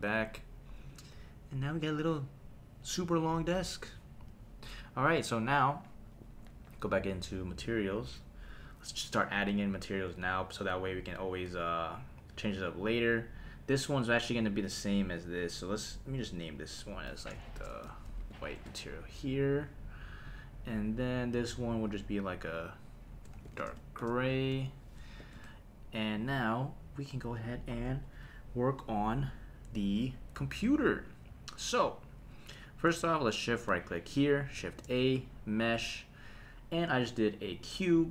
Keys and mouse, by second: 0.9 click, 7.7 click, 8.6 click, 10.7 click, 13.1-15.7 drag, 16.4-18.6 drag, 20.3 click, 21.8-25.4 drag, 31.0 click, 34.1 shift+right click, 34.5 shift+a.